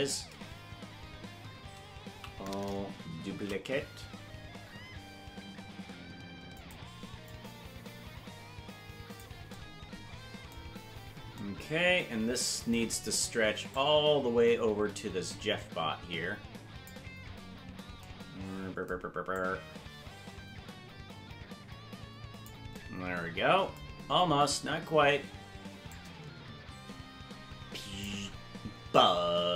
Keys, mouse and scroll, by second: 2.1 a, 3.3 shift+d, 7.2-9.2 drag, 10.8 scroll down 3, 13.7-16.9 drag, 19.3-22.5 drag, 23.8-24.2 scroll down 4, 25.8-28.0 shift+drag, 28.9-29.5 shift+drag.